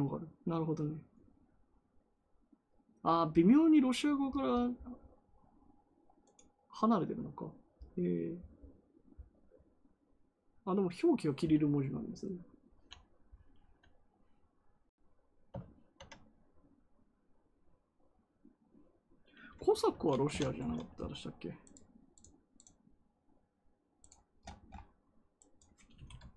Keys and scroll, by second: 25.8 space.